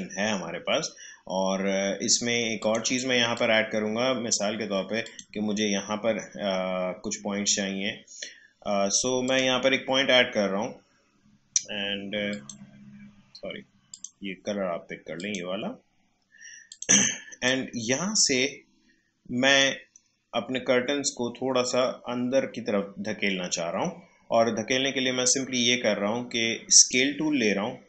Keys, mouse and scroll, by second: 2.6-5.0 drag, 9.2 click, 12.3 click, 16.3-22.0 drag, 26.7 click.